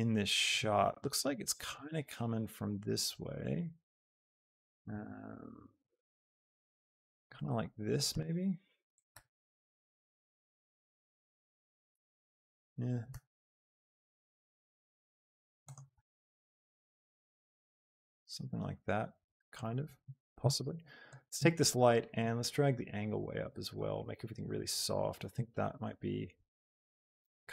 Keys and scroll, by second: 5.1 z, 8.0 r, 9.5 z, 13.2 r, 13.5 x, 16.1 z.